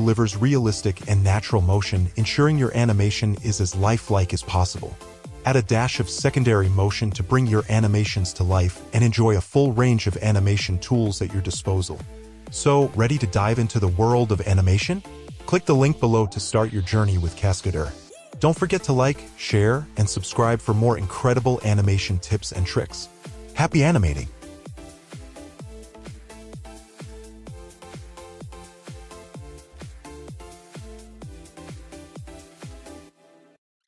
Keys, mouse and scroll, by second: 5.5 shift+z, 6.8 shift+z, 9.7 f, 13.1 shift+a, 13.5 shift+d, 14.8 shift+middle click, 19.5 shift+middle drag, 21.2 shift+middle drag, 30.7 -, 31.9 middle click, 32.5 middle click.